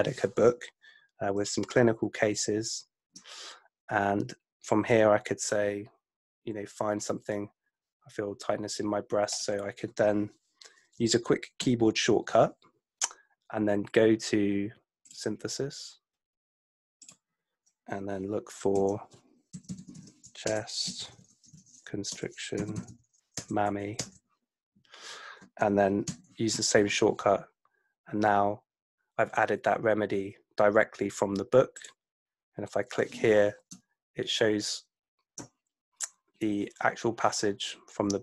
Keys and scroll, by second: 1.4 super+F2, 11.6 super+F7, 18.8 F2, 19.7-22.6 typing, 22.1 Return, 23.4 Return, 24.1 Return, 26.0 super+F7.